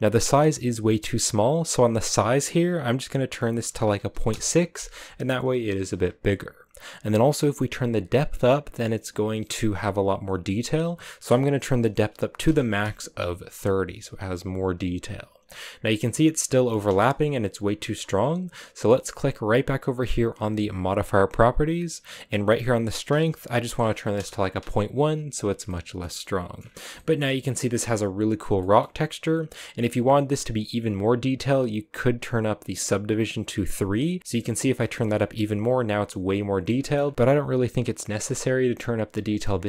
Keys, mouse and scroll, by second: 0.0 ctrl+z, 4.3-15.4 drag, 15.4-16.9 scroll up 3, 16.9-24.3 shift+middle drag, 24.3 click, 25.2-25.6 scroll down 2, 25.6 shift+middle click, 26.5-26.9 scroll up 5, 26.9 shift+middle click, 27.2-27.5 scroll up 2, 27.5-32.8 middle drag, 32.8-34.2 drag, 34.2 shift+middle click, 34.7-35.8 scroll up 2, 35.8 scroll down 2, 36.0-37.1 middle drag, 37.1-38.3 scroll up 1, 38.3-39.6 middle drag.